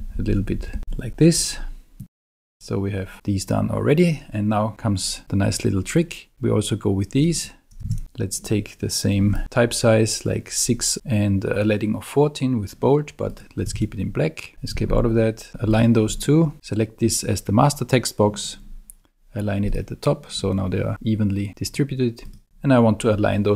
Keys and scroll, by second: 0.8 Right, 7.9 super+a, 13.7 super+a, 14.5 Escape.